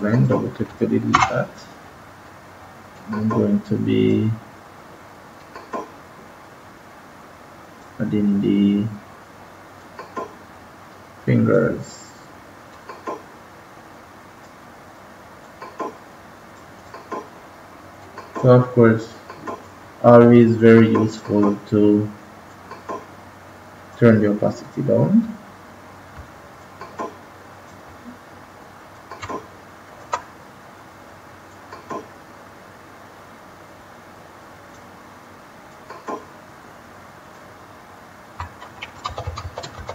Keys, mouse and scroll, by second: 1.0 Delete, 2.9 click, 26.5 click, 31.5 click, 39.0 ctrl+z, 39.2 ctrl+z.